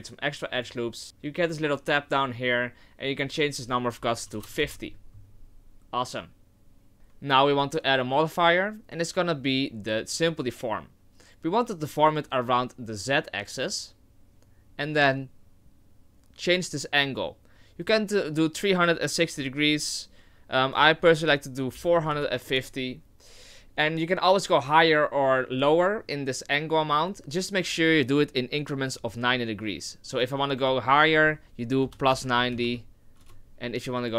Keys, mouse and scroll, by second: 0.0-0.3 scroll up 1, 0.6 click, 3.3 click, 6.9 right click, 6.9 shift+middle click, 7.5 click, 8.1 click, 13.0 click, 17.8 click, 20.6 click, 30.1 click, 33.7 click.